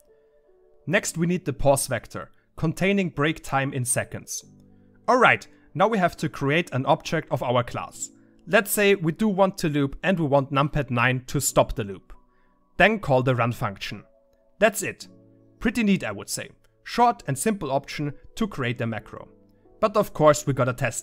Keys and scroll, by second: 19.1 w, 20.6 1.